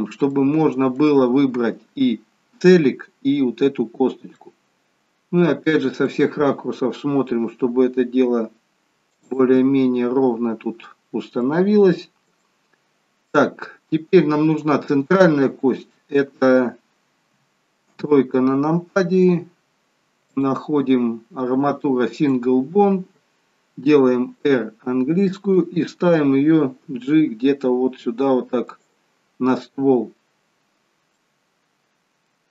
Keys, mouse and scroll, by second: 0.3 shift+middle click, 1.2 scroll up 4, 4.0-4.4 scroll down 3, 4.4 middle click, 7.2 g, 9.4 middle click, 12.7 shift+middle click, 13.5-14.1 scroll down 5, 17.2 KP_1, 17.8 KP_3, 20.3 click, 26.8 g, 31.2 middle click.